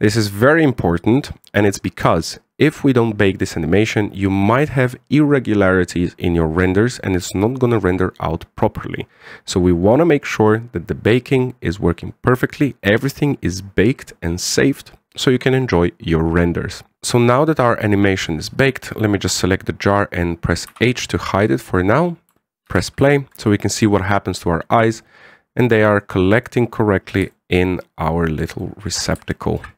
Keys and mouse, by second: 19.2 right click, 21.4 h, 23.4 alt+a, 23.8 shift+middle drag, 26.7-27.2 middle drag, 28.0-29.0 shift+middle drag, 29.3-29.7 middle drag.